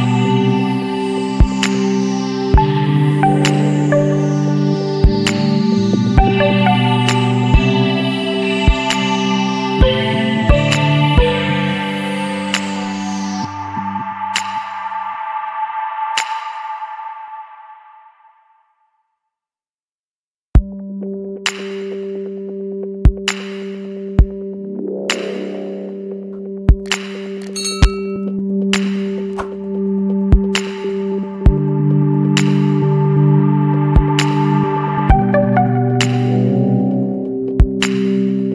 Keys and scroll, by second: 2.2 ctrl+z, 2.8 ctrl+t, 8.7 [, 9.8 Return, 10.1 ctrl+=, 10.2 space, 14.0 space, 15.6 space, 16.3 space, 18.1 Down, 19.1 Up, 19.1 Up, 19.4 Return, 19.5 space, 20.7 ctrl+-, 33.2 ctrl+=, 34.5 Return, 37.9 Return, 38.2 Up.